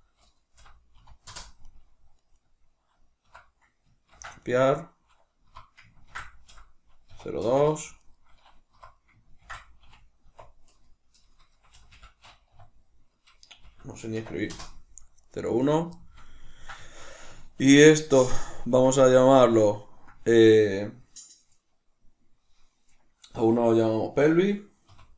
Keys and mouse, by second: 1.6 right click, 2.1 right click, 2.3 right click, 3.1 F2, 4.6 right click, 5.4 F2, 7.9 right click, 8.6 F2, 11.6 BackSpace, 14.5 Return, 15.1 right click, 15.5 right click, 15.9-25.1 shift+middle drag.